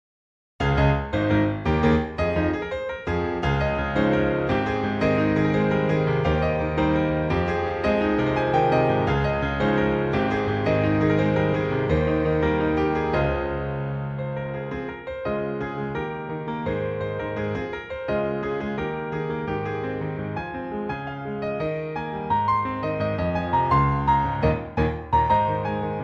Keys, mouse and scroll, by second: 2.7 click, 3.4 click, 6.2 click, 10.7 click, 12.7 click, 13.2 click, 13.4 click, 17.7 click, 18.0-20.1 scroll down 14, 20.1 click, 24.2 click.